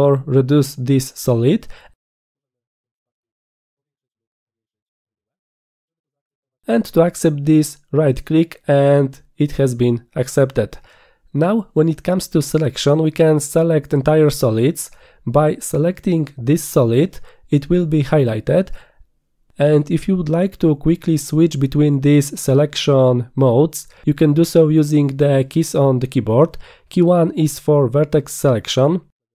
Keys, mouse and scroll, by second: 1.3-2.4 drag, 3.9-5.0 drag, 6.6 right click, 8.1 right click, 13.1 click, 15.2 click, 16.9 click.